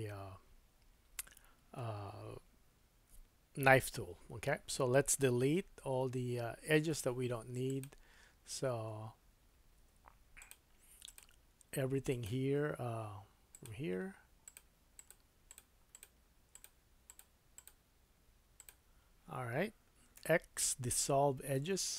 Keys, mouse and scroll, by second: 5.4 Tab, 6.0 Tab, 6.9 2, 7.8-10.4 middle drag, 10.4 alt+click, 10.5 alt+middle click, 11.0 click, 12.1 shift+click, 13.5 shift+click, 14.4 shift+click, 14.9 shift+click, 15.4 shift+click, 15.9 shift+click, 16.5 shift+click, 17.0 shift+click, 17.6 shift+click, 18.6 shift+click, 20.2 x.